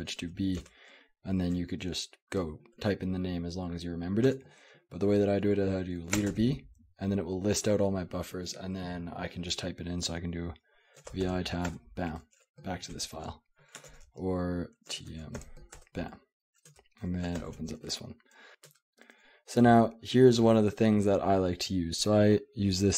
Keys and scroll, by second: 0.0-1.1 typing, 4.3 Escape, 6.2 space, 6.3 b, 10.9-12.2 typing, 13.7-20.9 typing, 15.8 Return, 17.4 ctrl+o.